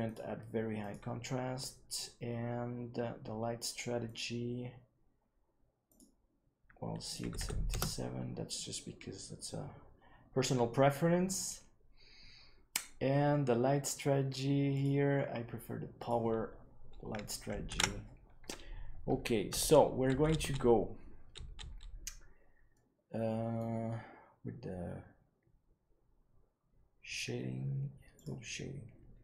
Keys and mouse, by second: 0.0-1.0 drag, 4.0 click, 5.9 click, 7.0 click, 7.3 KP_7, 14.9-16.1 drag, 18.0 ctrl+s, 22.7-23.5 middle drag.